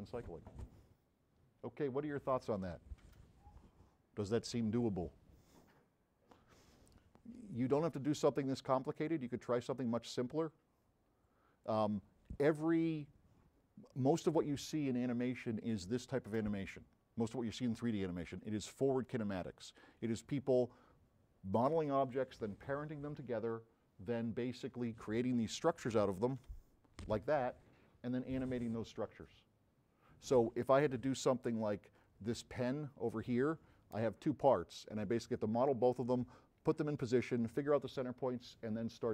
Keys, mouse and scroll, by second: 9.0 click, 10.1-11.7 drag, 19.8 click, 20.8 click.